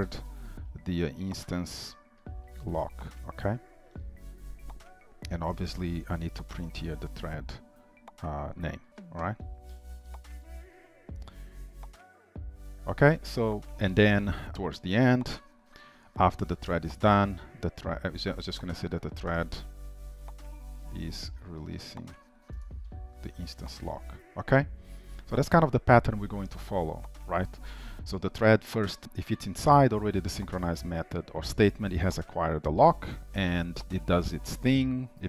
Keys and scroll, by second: 6.9 ctrl+w, 8.9 ctrl+c, 10.7 ctrl+v, 11.7 Delete, 13.7 ctrl+s, 14.5 ctrl+c, 15.2 ctrl+c, 15.2 ctrl+v, 18.9 ctrl+shift+Right, 23.6 ctrl+s.